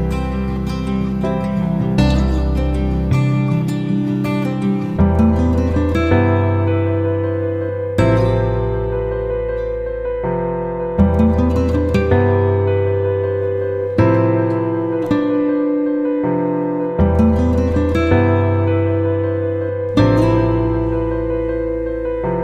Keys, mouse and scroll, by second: 4.0 click, 7.3 F9, 7.8 click, 18.3-19.5 typing, 20.4 click.